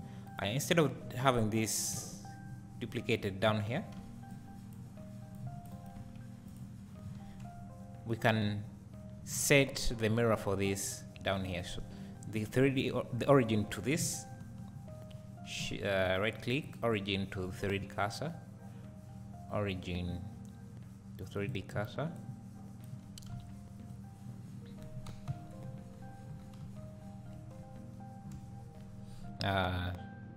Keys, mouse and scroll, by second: 0.2 click, 1.3 Tab, 1.9 z, 2.6-3.1 scroll down 2, 4.0 c, 5.8 right click, 6.0 x, 7.1 Tab, 15.9-21.6 right drag.